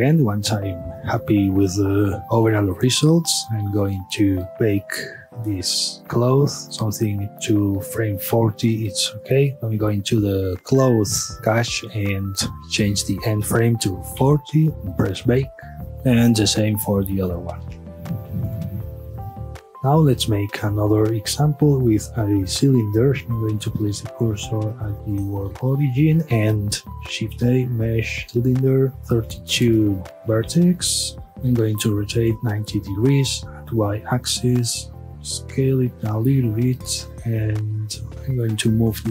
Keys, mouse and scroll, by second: 0.0-2.4 middle drag, 2.9 click, 5.9-7.7 shift+middle drag, 8.3-9.8 drag, 10.6 click, 11.3-14.3 drag, 14.3 KP_Enter, 14.9-15.9 drag, 17.2-18.6 drag, 18.6 KP_Enter, 19.6 click, 19.7 space, 19.8-23.2 middle drag, 23.7 shift+s, 26.9 shift+a, 30.2 KP_Enter, 31.0-31.4 scroll down 1, 31.4 r, 32.4 KP_Enter, 33.0 scroll down 1, 33.3-34.7 middle drag, 34.7 s, 36.0 click, 36.3-36.8 middle drag, 36.8-37.9 scroll up 1, 37.9 alt+click, 38.7-39.1 middle drag.